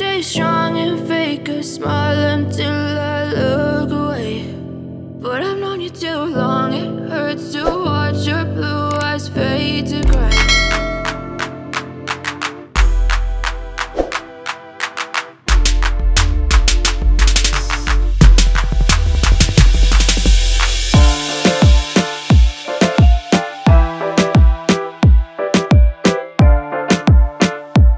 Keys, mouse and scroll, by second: 0.6-1.2 scroll down 1, 2.5 click, 4.6 click, 6.5 F4, 8.3 F9, 11.9 click, 14.1 scroll down 1, 16.2 click, 18.2 click, 22.4 click, 23.9 F4, 25.6 F9, 27.6 click.